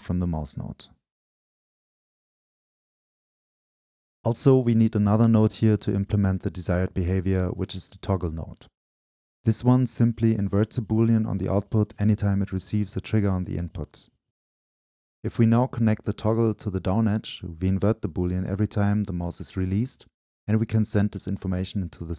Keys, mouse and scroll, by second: 9.1 click, 9.7-10.4 drag, 10.4 scroll up 2, 10.9 right click, 11.0-14.5 drag, 15.5-21.0 drag, 21.7 click.